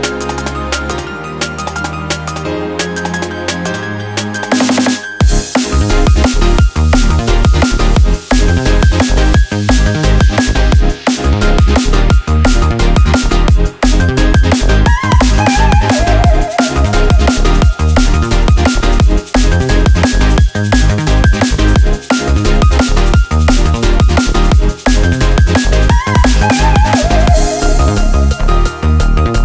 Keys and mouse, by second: 3.1-3.4 middle drag, 4.1 click, 4.6 shift+middle click, 6.1-6.5 middle drag, 6.7 shift+middle click, 9.1-9.6 shift+middle drag, 9.7 middle drag, 10.2 ctrl+middle click, 10.8 middle drag, 11.2-11.7 shift+middle drag, 15.1 shift+d, 17.0 r, 22.2-23.7 middle drag, 24.0 shift+middle drag, 24.6-25.4 middle drag, 25.9 shift+r, 26.8 shift+middle drag, 27.5-28.4 middle drag, 28.8 ctrl+z, 29.1-29.4 middle drag.